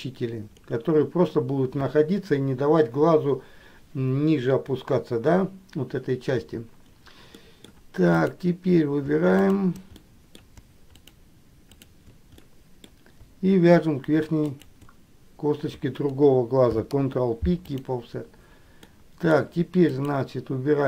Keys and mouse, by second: 7.6 middle click, 8.3 click, 9.6 shift+click, 10.3 middle click, 11.2 shift+click, 11.9 shift+click, 12.7 middle click, 14.7 shift+click, 16.8 ctrl+p, 19.2 middle click.